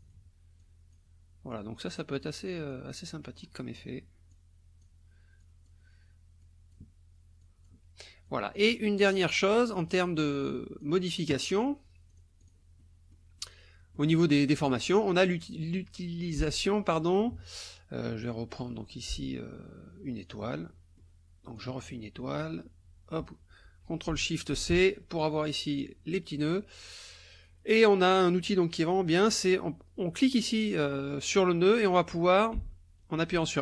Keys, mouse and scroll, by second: 0.6 click, 1.5 click, 2.7 click, 4.3 click, 5.4 click, 6.4 click, 7.4 click, 8.3 click, 9.4 click, 10.5 click, 12.1 click, 12.8 click, 13.4 click, 14.8 click, 18.7 click, 20.2 click, 20.7 click, 21.6 click, 24.5 ctrl+shift+c, 25.7 click, 26.8 click, 31.3-33.6 drag.